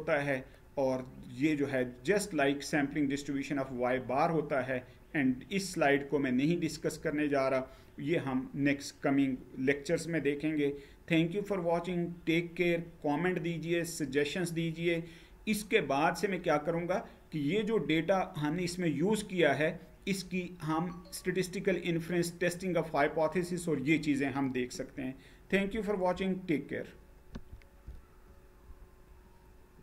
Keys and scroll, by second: 3.4 Page_Down, 27.1 F9.